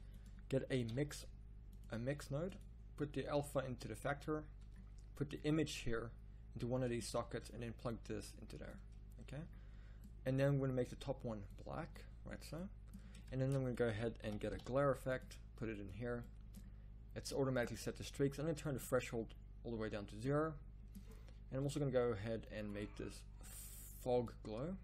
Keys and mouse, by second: 0.5 click, 15.7 shift+a.